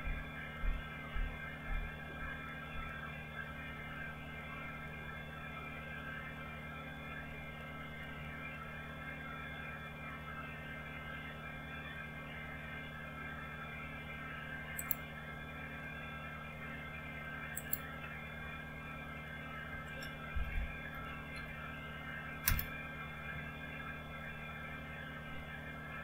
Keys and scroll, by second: 19.6 Right, 20.0-21.2 typing, 22.1 Return.